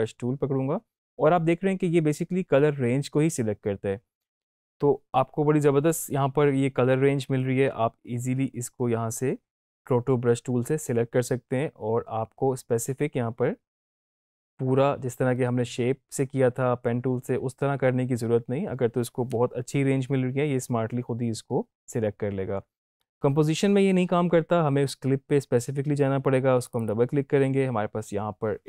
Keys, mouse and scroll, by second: 26.6 click.